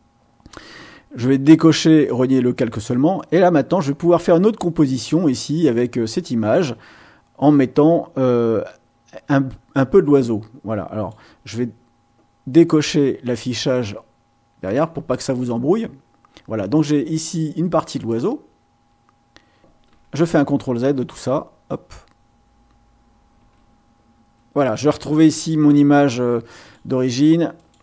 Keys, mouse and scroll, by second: 2.0 click, 3.1-5.2 drag, 6.5-11.3 drag, 13.3 click, 14.6 click, 17.1-19.4 drag, 19.9 ctrl+z, 23.3 ctrl+z, 26.5 click, 27.5 click.